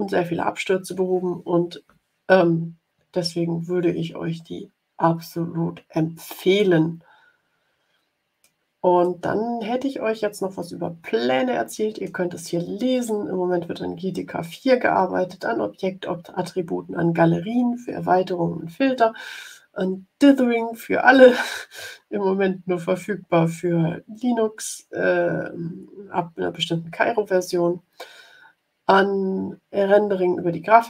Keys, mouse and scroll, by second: 6.5 click, 7.1 middle click, 7.4 click, 7.5 middle click, 7.6 click, 9.0-12.1 drag.